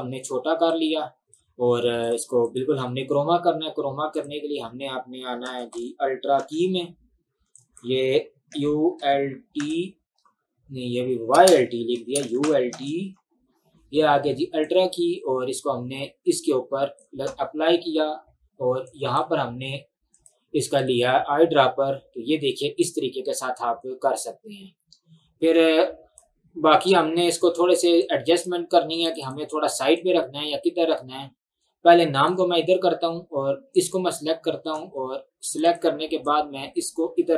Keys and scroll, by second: 5.2-6.9 typing, 8.6-9.6 typing, 11.5-13.2 typing.